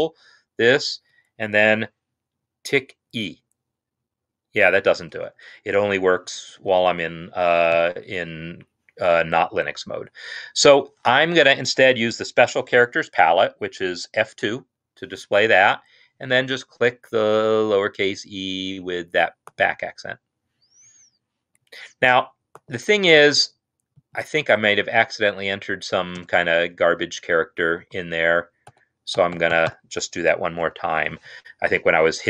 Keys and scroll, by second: 2.5-2.9 typing, 4.9 ctrl+space, 6.1-7.7 typing, 14.3 F2, 21.8 Escape, 25.3 Left, 25.8 Left, 26.6 space, 27.5 Right, 28.2 ctrl+a, 28.9 BackSpace, 29.3 BackSpace, 29.5-29.9 BackSpace, 30.7 F2, 30.9 F2.